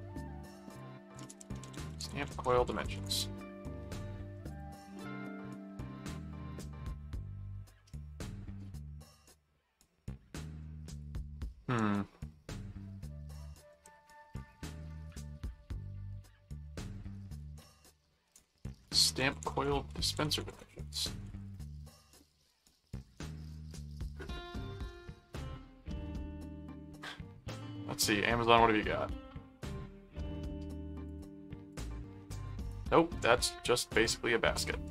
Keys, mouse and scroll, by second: 0.7 click, 1.2 alt+d, 1.4 alt+s, 1.4-3.3 typing, 4.5 click, 10.9 ctrl+click, 11.8 ctrl+w, 13.2 middle click, 13.8 ctrl+Tab, 17.5 ctrl+t, 17.7-21.8 typing, 24.2 middle click, 25.3 ctrl+middle click, 26.3 ctrl+middle click, 26.8 ctrl+w, 31.1 click, 32.1 click, 32.4 click, 33.9 ctrl+click, 34.6 ctrl+w.